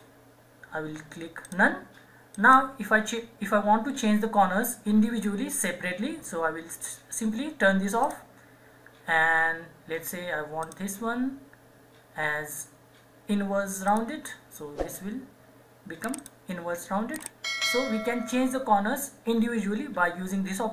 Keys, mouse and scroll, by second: 13.9 alt+Num_Lock, 13.9 alt+click.